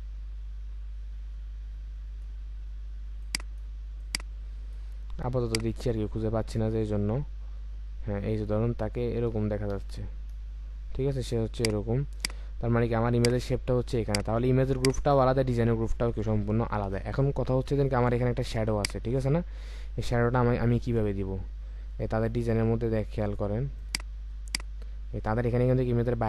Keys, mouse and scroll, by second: 9.7 Right, 9.9 Right, 10.3 Return, 18.7 ctrl+click.